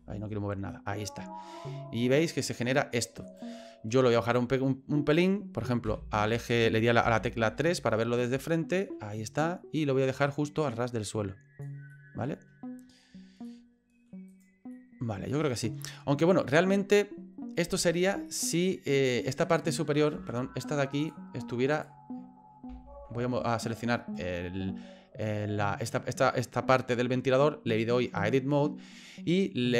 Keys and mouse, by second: 0.7 middle click, 3.2 right click, 4.4 click, 5.8 KP_1, 7.0 KP_3, 8.5 shift+middle click, 10.2-11.6 drag, 12.0 middle click, 13.5 middle click, 14.3 right click, 14.8-15.8 middle drag, 18.2 middle click, 19.4 right click, 20.1 ctrl+z, 21.1 click.